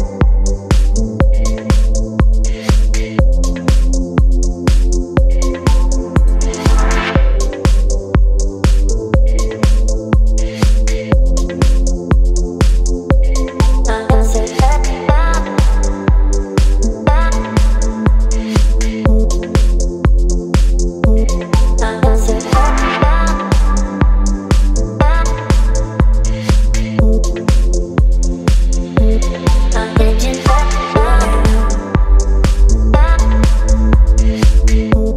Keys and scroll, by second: 8.4 Return, 21.2 space, 27.4 space.